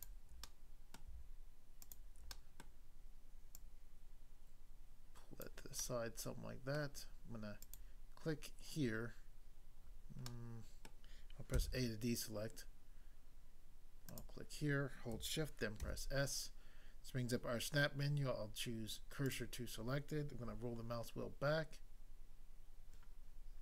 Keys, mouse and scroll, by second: 0.5 middle click, 1.0 middle click, 1.8 shift+click, 2.3 middle click, 2.6 middle click, 3.6 click, 5.5 click, 5.8 middle click, 6.8 middle click, 7.6 click, 10.3 middle click, 10.9 middle click, 11.5 a, 14.1 click, 15.9 s, 19.2 click, 20.4 scroll down 1.